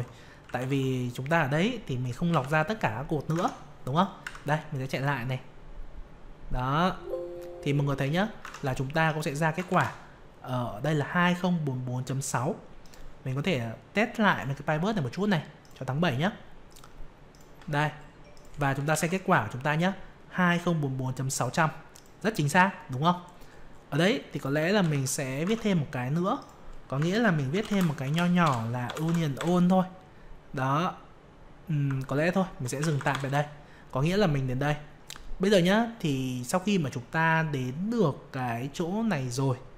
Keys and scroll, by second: 0.7 ctrl+Down, 2.3 ctrl+Up, 3.3 alt+Tab, 4.2 F5, 8.4 alt+Tab, 18.9 ctrl+Down, 24.8 ctrl+Up, 25.4 alt+Tab.